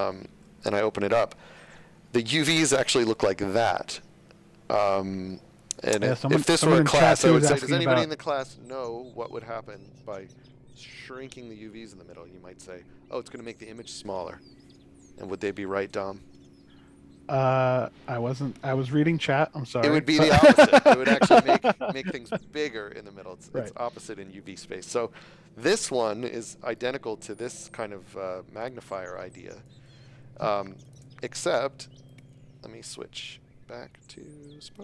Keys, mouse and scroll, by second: 0.3 Tab, 1.3-2.4 scroll up 1, 2.5 shift+middle click, 26.7 click, 29.2 shift+a, 30.2 space, 30.8 click, 32.0 click.